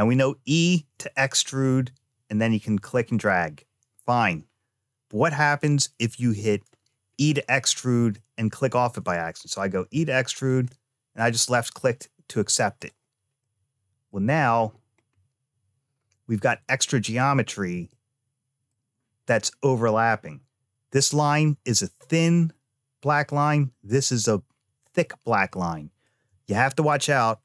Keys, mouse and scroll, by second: 1.4 e, 6.2-6.6 scroll up 3, 7.0-7.6 scroll down 2, 7.9 shift+middle click, 9.5 e, 11.2-12.6 scroll up 2, 12.6 click, 13.2 middle click, 14.2-14.5 scroll up 2, 14.9-15.2 scroll down 1, 15.8-16.2 scroll down 1, 17.7 shift+middle click, 19.6-20.7 scroll up 1, 22.2-22.7 scroll down 1, 25.3 middle click.